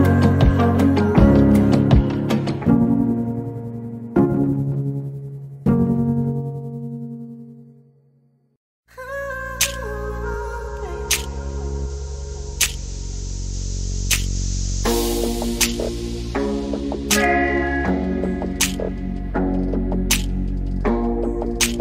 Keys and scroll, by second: 1.9-2.8 typing, 5.0-6.3 typing, 8.6 m, 10.1-10.6 typing, 17.5-18.4 typing, 20.1 Delete, 20.8 Delete, 21.1-21.8 typing.